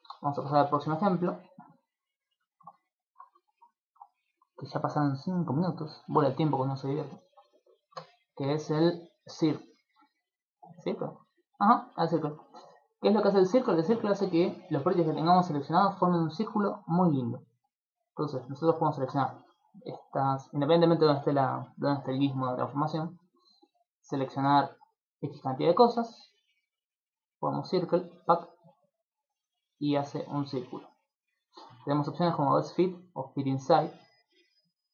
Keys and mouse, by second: 0.2 shift+middle click, 1.5 click, 2.5 shift+middle click, 2.8 ctrl+middle click, 3.4 shift+middle click, 4.1 ctrl+middle click, 4.6 middle click, 5.1 shift+middle click, 5.9 ctrl+middle click, 6.9 middle click, 7.8 right click, 7.9 Tab, 10.5 shift+middle click, 11.5 ctrl+middle click, 11.9 middle click, 12.2 shift+middle click, 12.5 middle click, 13.3 shift+middle click, 13.7 ctrl+middle click, 16.0 shift+middle click, 17.0 alt+right click, 17.7 alt+shift+right click, 18.1 alt+right click, 18.9 alt+shift+right click, 20.1 ,, 25.0 click, 25.6 middle click, 27.3 click, 31.9 click, 34.5 click.